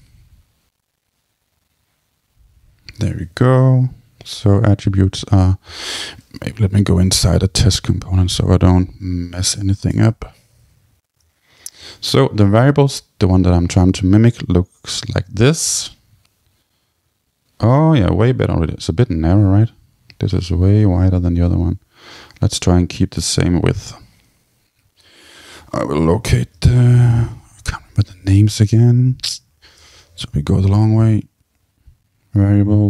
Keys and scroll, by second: 7.6 super+k, 9.9 Return, 25.5 super+k, 29.3 Down, 29.8 Return.